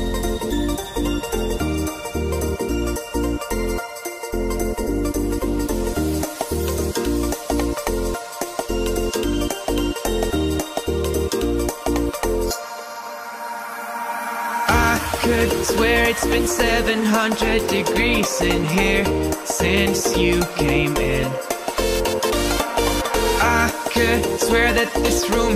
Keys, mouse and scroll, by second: 0.5-0.9 drag, 1.2 middle click, 2.0 KP_1, 3.4 Tab, 4.1 click, 5.9 click, 6.8 g, 7.2 z, 8.2 click, 18.3 Tab, 19.0-19.4 drag, 20.1 click, 21.7 click, 22.9-23.5 right drag, 24.9 Tab, 25.4 Tab.